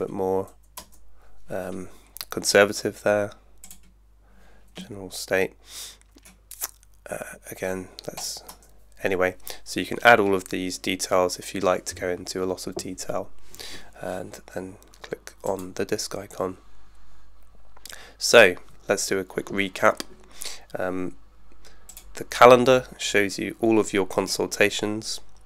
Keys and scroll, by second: 0.8 Return, 8.5 Return.